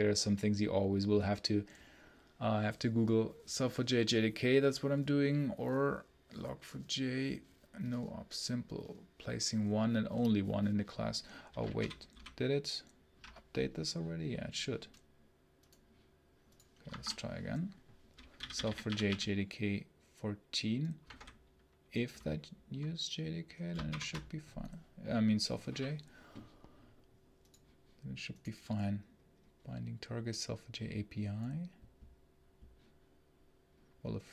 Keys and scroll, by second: 12.0 ctrl+super+l, 16.8 shift+Escape, 18.0-19.5 typing, 20.9 space, 21.1 h, 23.7 ctrl+shift+F10.